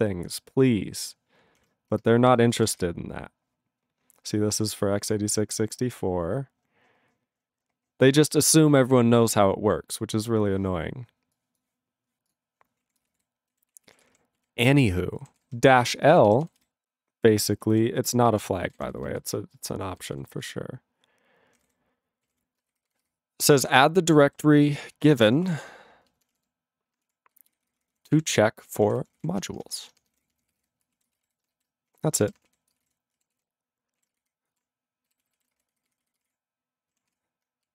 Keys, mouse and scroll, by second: 12.3 click, 12.8 ctrl+a, 13.0 ctrl+space, 13.1 ctrl+e, 13.1 ctrl+g, 13.7 ctrl+s, 13.8 ctrl+p, 13.9 ctrl+a, 14.0 ctrl+p, 14.1 ctrl+p, 14.4 ctrl+e, 15.4 ctrl+s, 15.5 ctrl+p, 15.6 ctrl+p, 15.7 ctrl+p, 15.8 ctrl+b, 16.1 ctrl+b, 16.4 ctrl+b, 16.6 ctrl+b, 17.2 ctrl+p, 17.7 ctrl+n, 18.0 ctrl+a, 18.2 ctrl+space, 18.3 ctrl+n, 18.7 ctrl+w, 18.8 ctrl+n, 18.9 ctrl+n, 19.1 ctrl+n, 19.2 ctrl+n, 19.6 ctrl+p, 20.0 ctrl+n, 20.2 ctrl+n, 20.5 ctrl+n, 21.6 ctrl+o, 21.7 ctrl+y, 22.3 ctrl+k, 22.4 ctrl+p, 22.8 alt+f, 22.9 alt+f, 23.0 alt+f, 23.5 alt+f, 23.6 alt+f, 24.3 alt+b, 24.6 alt+f, 25.0 alt+b, 25.0-26.0 typing, 26.3 alt+d, 26.9 alt+d, 27.3 ctrl+f, 27.5 ctrl+f, 27.8 ctrl+f, 27.9 ctrl+f, 28.2 ctrl+e, 28.4 ctrl+b, 28.6-32.9 typing, 31.2 ctrl+g, 31.7 ctrl+b, 33.4 ctrl+s, 34.0 ctrl+a, 34.3 alt+f, 35.1 ctrl+b, 35.2 ctrl+b, 35.4 ctrl+b, 35.5 space, 35.9 ctrl+f, 36.0 ctrl+f, 36.2 ctrl+f, 36.2 ctrl+d, 37.2 ctrl+s.